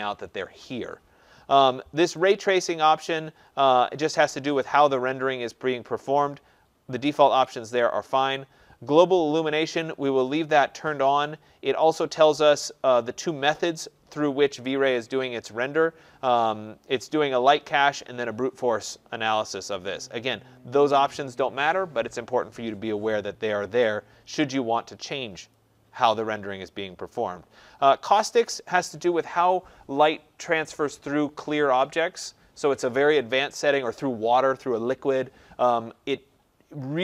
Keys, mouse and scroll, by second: 2.3 click, 7.5 click, 9.6 click, 25.5 click, 28.1 click.